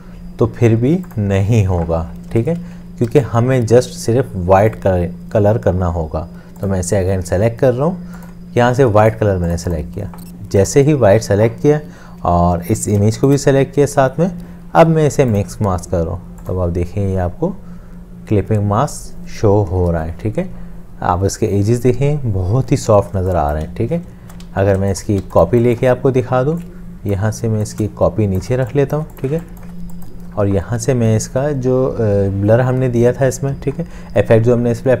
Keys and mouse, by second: 3.3 ctrl+z, 13.6 shift+click, 23.2 space, 24.2 ctrl+alt+space, 24.5 ctrl+z, 25.2 space, 25.3 space, 27.5 space, 27.8 alt+click, 28.6 space.